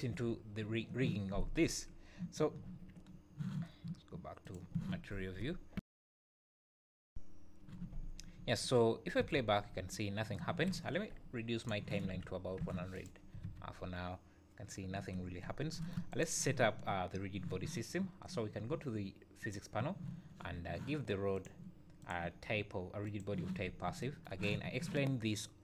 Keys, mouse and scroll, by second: 0.1 KP_1, 3.1-4.2 scroll down 1, 4.5 click, 4.5 scroll down 2, 8.1 scroll up 2, 8.4 `, 9.2 space, 10.5 Escape, 11.6 click, 13.4 space, 15.5 Escape, 16.1 click, 19.4 click, 21.3 click, 23.6 `.